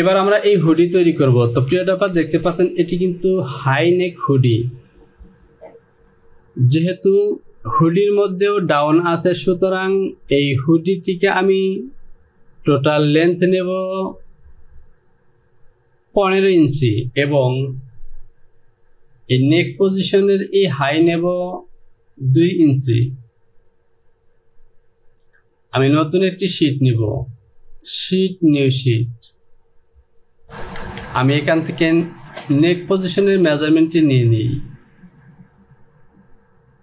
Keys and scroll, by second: 30.4 j, 31.1 Return.